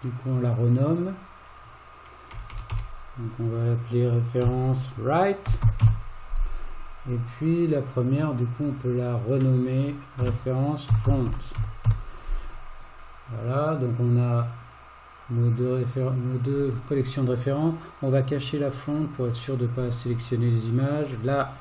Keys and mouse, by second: 0.4-7.4 drag, 2.6 BackSpace, 8.1 click, 9.4-13.5 drag, 14.4 click, 18.6 click, 21.0 click.